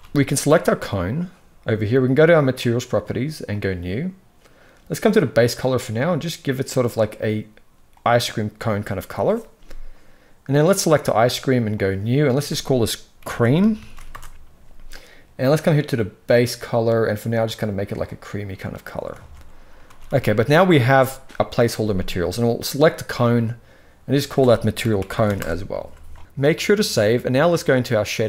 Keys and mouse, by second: 0.3 click, 2.3 click, 3.3 click, 5.0 click, 10.3 click, 11.5 click, 12.0-13.8 drag, 18.9 alt+a, 19.6 ctrl+s, 19.8 ctrl+s, 22.3 click, 23.8-25.1 drag, 26.1 ctrl+s.